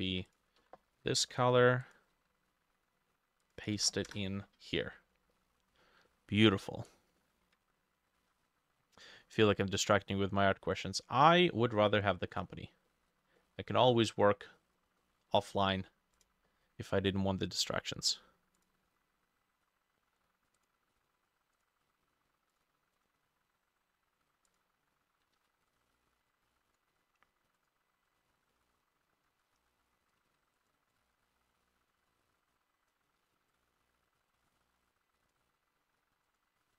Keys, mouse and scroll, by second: 0.6 ctrl+c, 0.7 typing, 1.0 Escape, 4.1 ctrl+v, 4.1 Return, 4.9 middle click, 5.4 middle click, 5.8-6.1 scroll down 1, 6.1 middle click, 7.2 middle click, 8.2 ctrl+s, 9.0 middle click, 10.0 middle click, 10.9 middle click, 11.8 middle click, 12.3 middle click, 12.9 middle click, 13.4 middle click, 13.9 middle click, 15.0 middle click, 15.5 middle click, 17.8-18.8 scroll up 5, 23.0 double click, 25.4 ctrl+d, 28.6 middle click, 30.3 ctrl+z, 31.0 double click, 33.2 ctrl+d.